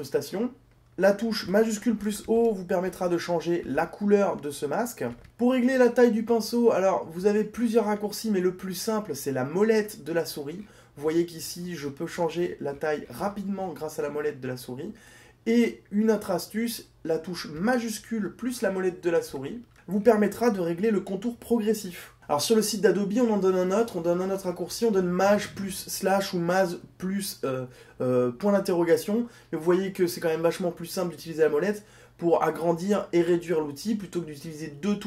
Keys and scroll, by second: 1.6 shift+o.